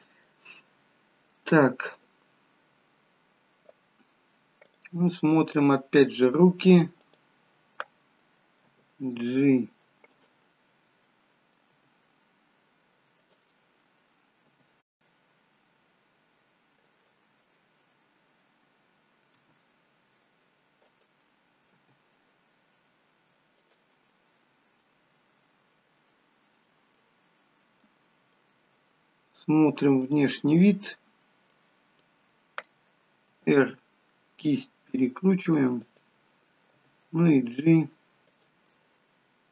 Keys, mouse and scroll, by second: 4.8 click, 5.3 middle click, 7.0 click, 7.8 middle click, 8.8 g, 10.6 middle click, 11.9 g, 13.7 middle click, 14.6 g, 17.4 middle click, 19.3 r, 21.7 g, 24.0 middle click, 25.1-25.6 scroll down 2, 25.6 middle click, 25.6-26.0 scroll down 1, 27.0 middle click, 29.8 middle click, 29.8 click, 30.4 middle click, 33.0 middle click, 33.2 r, 36.7 g, 38.7 middle click.